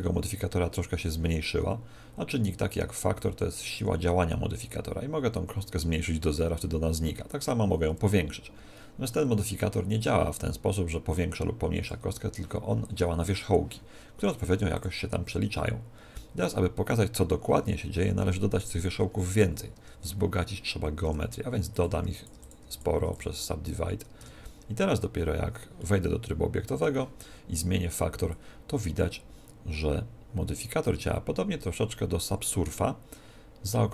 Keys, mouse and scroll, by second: 3.1 click, 14.3 click, 18.5-20.9 middle drag, 19.7 Tab, 21.1-23.0 typing, 24.2 Tab, 24.7 Tab, 25.7-27.7 middle drag, 28.3 click.